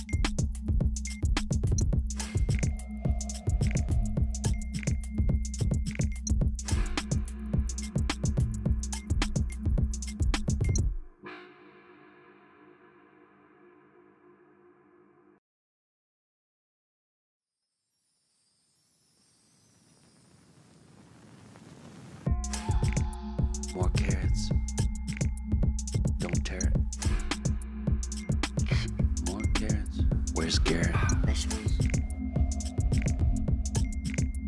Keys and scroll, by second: 0.0-0.1 typing, 1.8 ctrl+t, 5.1 Return, 7.5 ctrl+o, 12.4 ctrl+t, 16.9 Return, 17.6 space, 19.0 ctrl+t, 20.5 Return, 23.7-26.7 typing, 27.3 Return, 28.9 ctrl+t, 30.6 Return, 34.2-34.4 typing.